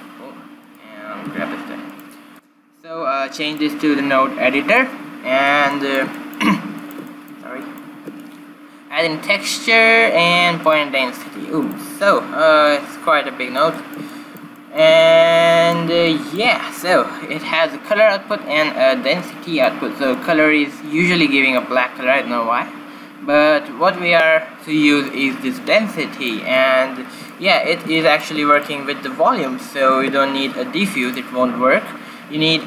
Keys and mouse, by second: 0.6-2.8 drag, 1.2 g, 2.3 q, 2.8-3.9 right drag, 3.4-5.3 drag, 5.6-9.3 middle drag, 7.9 shift+a, 12.5-14.4 drag, 14.4-17.8 middle drag, 18.8-21.8 drag, 25.0-26.8 drag, 27.2-29.4 middle drag, 29.6 click, 29.7 shift+s.